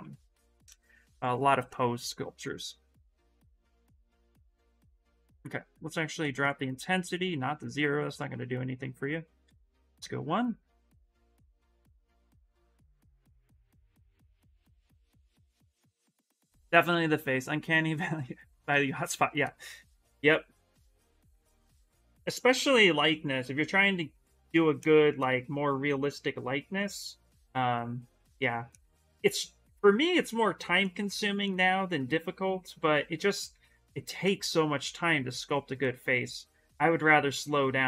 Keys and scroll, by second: 5.1 space, 6.7 space, 33.6 s, 34.5 s.